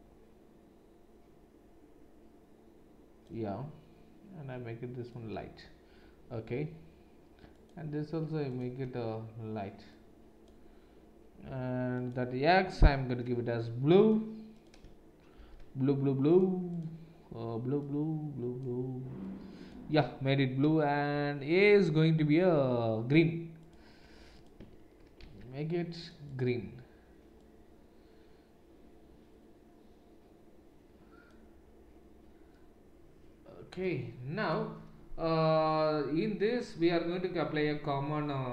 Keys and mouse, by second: 11.9 click, 12.2-14.0 middle drag, 14.0-16.3 drag, 16.3-21.6 middle drag, 21.6 click, 21.8-23.7 middle drag, 23.7-26.0 drag, 26.0 middle click, 26.3 click, 26.5-34.4 middle drag, 34.4 click, 34.4-38.5 middle drag.